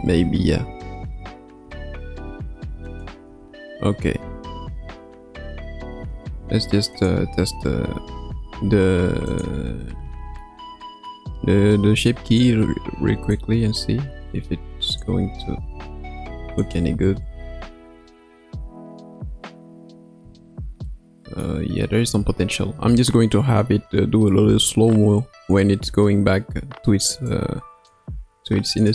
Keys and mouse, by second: 1.6 space, 2.8 click, 3.2 space, 5.9 space, 7.0 click, 8.8 ctrl+Tab, 9.3 click, 10.4-11.1 middle drag, 12.2 click, 13.3-15.1 drag, 16.7 click, 17.0 space, 20.2 space, 20.8-21.4 middle drag, 27.2 click, 28.8 click.